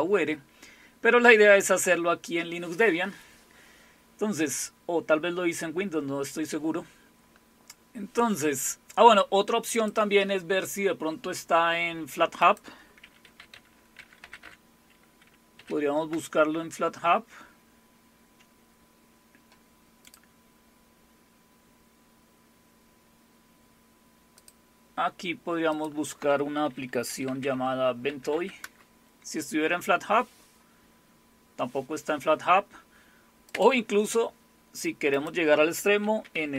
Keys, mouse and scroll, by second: 9.7 click, 12.4 click, 13.0-15.5 typing, 16.1 Return, 20.1 click, 24.4 click, 25.7 click, 26.8-28.8 typing, 33.5 click, 35.1 click, 35.8-36.5 typing.